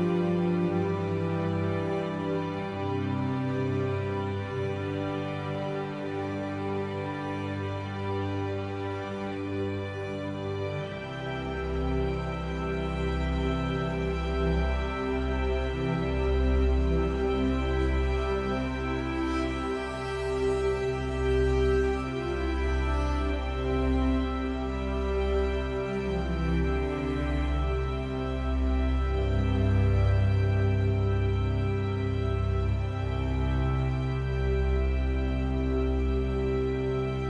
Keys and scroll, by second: 8.7 ctrl+z.